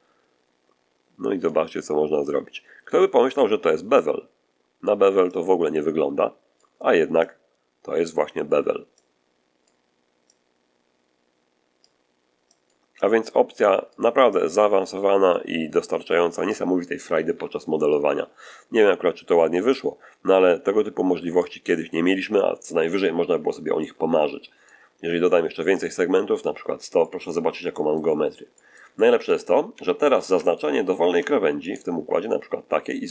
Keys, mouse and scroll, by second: 2.2-3.5 drag, 3.9 click, 5.2-6.7 drag, 7.1-8.6 drag, 8.9 click, 10.2-11.9 drag, 12.4 click, 12.9 click, 14.2-15.4 drag, 15.8 click, 19.6-21.5 drag, 23.4 scroll down 1, 23.7-24.8 middle drag, 25.7 click, 26.9-28.0 middle drag, 28.4 middle click, 29.6 a, 30.7 alt+shift+scroll up 1, 31.6 alt+shift+right click.